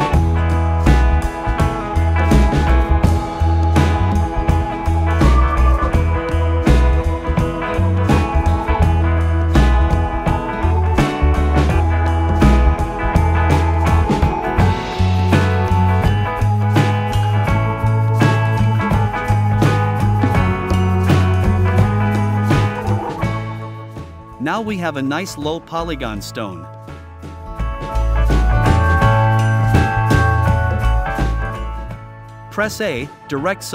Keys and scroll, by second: 17.0 i, 18.2 v, 23.3 i, 24.9 v.